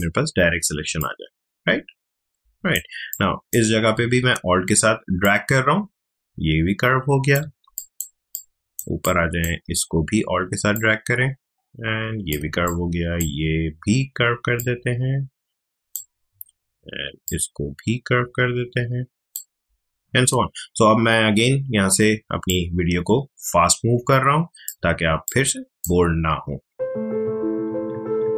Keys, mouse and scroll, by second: 0.9 ctrl+click, 3.0 space, 3.1-7.6 drag, 7.6 space, 7.7 click, 8.1 space, 8.3 click, 8.4 space, 9.0 click, 9.1 space, 10.7-12.6 alt+drag, 12.6 space, 12.8 click, 14.5-25.0 alt+drag, 25.0 space, 25.2 click, 25.5 space, 26.9-28.3 alt+drag.